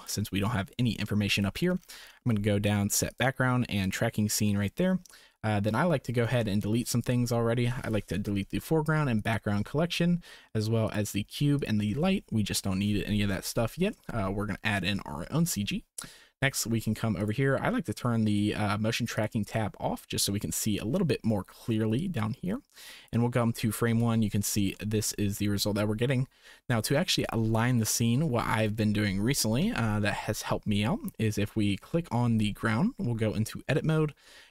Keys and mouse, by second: 3.1 click, 3.8 click, 6.5 shift+click, 7.8 click, 8.6 Delete, 9.1 click, 9.5 Delete, 10.9 click, 11.1 Delete, 11.8 Delete, 13.6 shift+click, 15.1 ctrl+s, 17.2-19.6 drag, 22.5 click, 24.9 shift+click, 25.9 shift+click, 33.6 Tab.